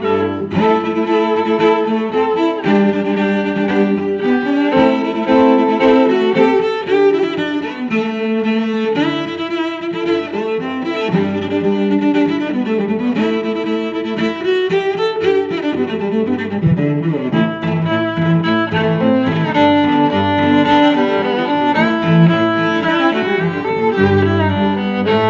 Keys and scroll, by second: 0.0-0.1 typing, 1.2-8.6 typing, 2.2 Escape, 3.3 Escape, 6.2 Escape, 9.4 Escape, 9.9 j, 9.9 space, 10.0 Escape, 10.2 h, 12.5 space, 15.9 Escape, 16.5 Escape, 17.6 b, 18.5 space, 19.7-23.3 typing, 19.8 Caps_Lock.